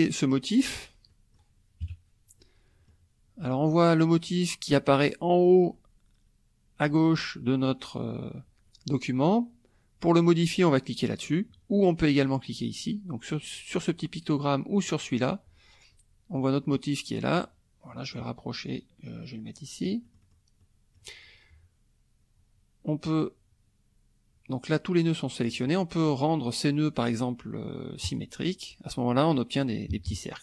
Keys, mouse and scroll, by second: 1.1 click, 1.8 KP_Subtract, 2.4 click, 13.3 click, 14.9 click, 16.3 click, 17.3-20.5 drag, 20.0 right click, 20.6 click, 28.1 click, 29.9 KP_Subtract.